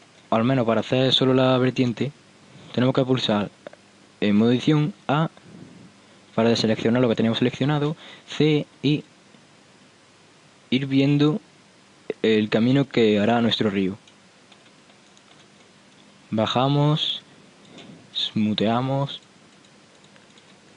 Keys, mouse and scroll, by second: 4.5 Tab, 5.2 a, 7.9 c, 13.4-16.0 middle drag, 16.0-16.6 scroll up 1, 16.6-17.6 scroll up 1, 17.6 middle click, 19.3-20.7 drag.